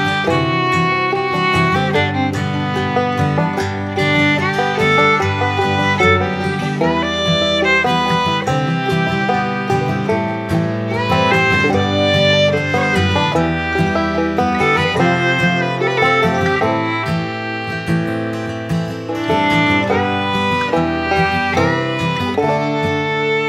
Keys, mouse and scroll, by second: 5.2 right click, 5.9 click, 10.1 click, 12.9-14.2 drag, 18.0-20.9 drag, 21.8-23.4 drag.